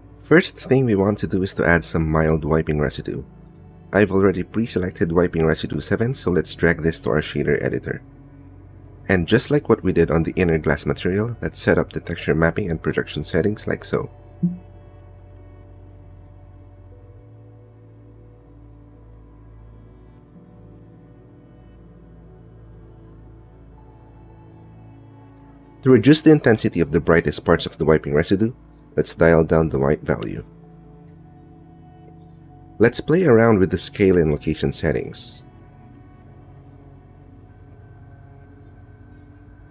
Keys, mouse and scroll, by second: 0.2-1.2 drag, 3.0 click, 4.3 click, 6.8 click, 7.6 click, 9.3 ctrl+t, 9.8 click, 10.5 click, 10.8 click, 11.4 x, 12.0-13.2 drag, 13.5-14.6 drag, 14.8 click, 15.5 click, 16.2 click, 16.9 click, 17.1 Tab, 18.1 click, 19.5 click, 21.4 Tab, 21.8 click, 23.8 click, 24.5 middle click, 25.4 click, 26.7-28.0 drag, 28.2 middle click, 28.8 click, 32.3 click, 33.4-34.7 shift+middle drag, 34.9 shift+middle click.